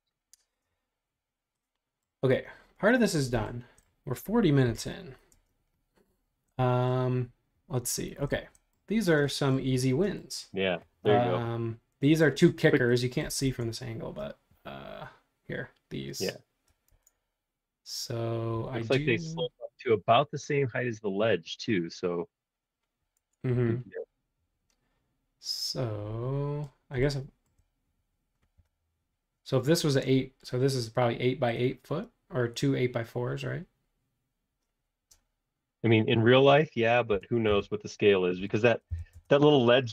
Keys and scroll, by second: 4.6 e, 5.3 space, 13.4 super+Tab, 16.9 super+Tab, 17.4 super+Tab, 23.2 super+Tab, 28.6 r, 37.1-39.9 typing.